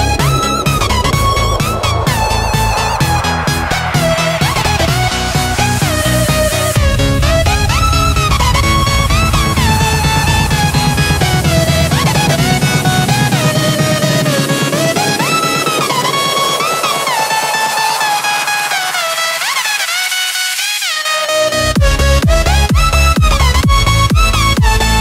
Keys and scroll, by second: 0.0-0.7 space, 2.6 space, 3.1 super+space, 3.2-3.7 super+space, 13.5-14.4 typing, 16.8 ,, 18.2-19.3 typing, 22.2 space, 22.7 super+space, 22.8 super+space, 22.9 super+space, 23.0 super+space, 23.1 super+space, 23.1 super+space, 23.2 super+space.